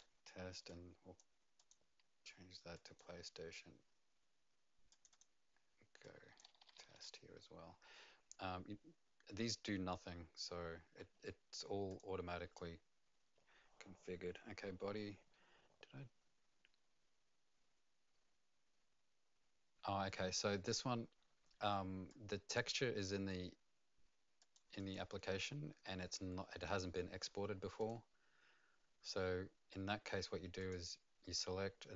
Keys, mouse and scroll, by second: 0.0-0.3 typing, 0.6 click, 1.5 click, 2.7 click, 4.9 click, 5.1 click, 6.5-7.4 typing, 11.9 click, 22.1 click, 24.5 click, 27.8 click, 30.6 click.